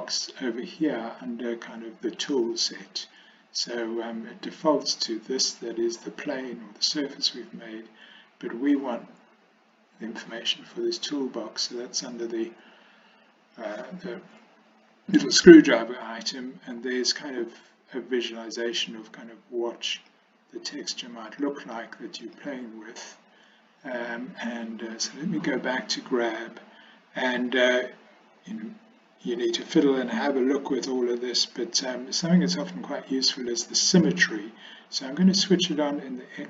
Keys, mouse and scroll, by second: 12.2 click, 18.8 click, 20.2 click, 21.4 click, 22.3 click, 25.2 click, 32.6 click, 35.2 click.